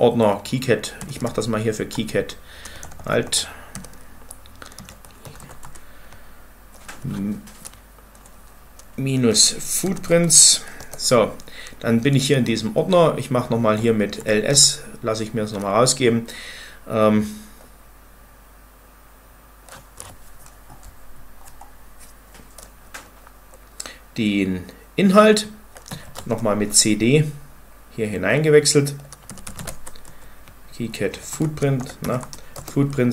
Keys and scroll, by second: 0.9-5.7 typing, 8.9-9.7 typing, 9.9 Tab, 10.6 Return, 12.1-14.5 typing, 25.5-26.2 typing, 28.9-29.9 typing, 29.9 Tab, 30.9-33.1 typing, 31.1 Tab, 32.4 Return.